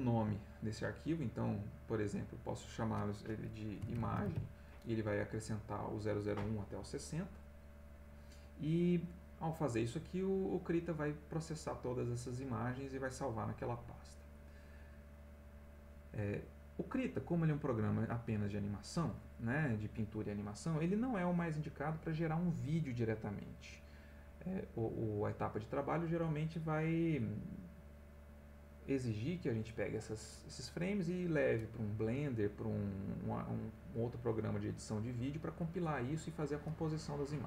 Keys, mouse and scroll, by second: 2.0 click, 3.5-4.8 typing, 15.6-16.3 drag.